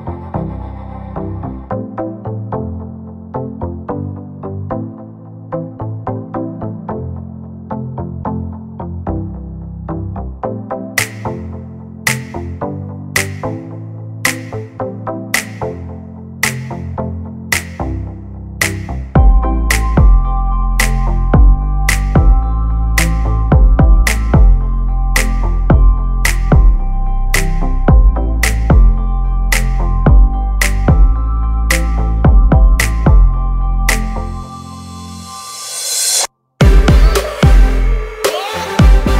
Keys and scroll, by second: 19.5 ctrl+c, 20.2 ctrl+f.